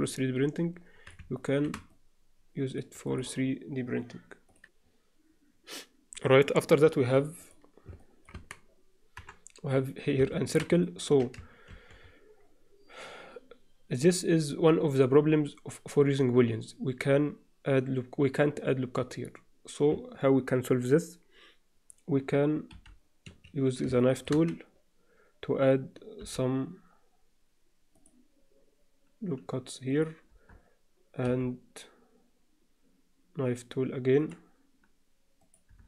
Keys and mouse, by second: 0.1-1.1 alt+middle drag, 1.4 shift+middle click, 1.9-2.8 middle drag, 3.1 click, 7.5 click, 8.0 middle click, 9.2 Tab, 9.2 KP_7, 10.3 alt+shift+middle click, 10.9 ctrl+alt+middle click, 11.7 ctrl+r, 24.0 shift+click, 26.3 k, 31.3 k.